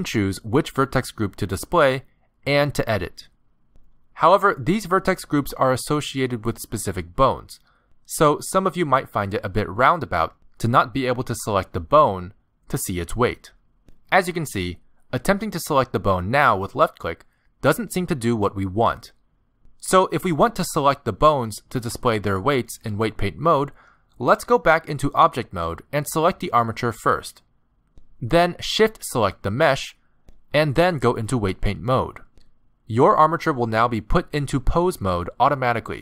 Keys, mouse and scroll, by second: 1.2 click, 2.7 click, 3.9 click, 5.6 middle click, 8.5 middle click, 10.8 middle click, 16.4 click, 18.3 middle click, 19.9 ctrl+z, 21.1 middle click, 24.8 ctrl+Tab, 26.8 click, 28.3 z, 29.5 shift+click, 30.3 z, 31.5 ctrl+Tab, 33.8 z.